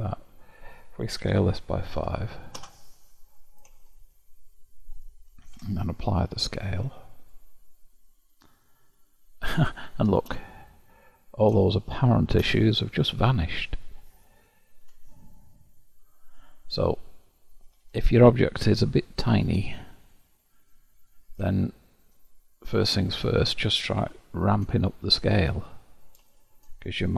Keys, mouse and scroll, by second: 1.3 s, 3.9-5.5 shift+middle drag, 5.5 ctrl+a, 8.1-10.6 middle drag, 10.6-11.1 scroll up 1, 11.1-11.7 scroll up 4, 11.7-14.7 shift+middle drag, 14.9 Tab, 16.4-17.5 drag, 17.7 g, 19.8-22.8 shift+middle drag, 22.8 click, 24.2 0, 24.9-26.0 shift+middle drag, 26.0 click.